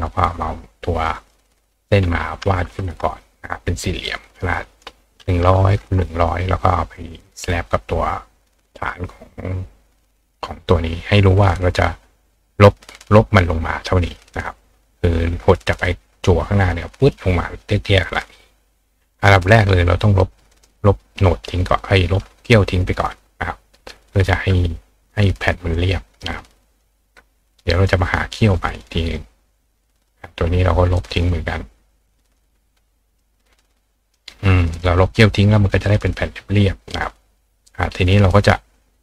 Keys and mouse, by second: 1.1 click, 4.6 click, 7.2 click, 8.9-10.3 drag, 19.1 click, 20.5 click, 21.7-23.9 drag, 25.7-26.8 drag, 27.9-29.1 drag, 30.0 click, 31.0-32.4 drag, 33.2 click, 34.7 click, 35.8 click, 36.9 click.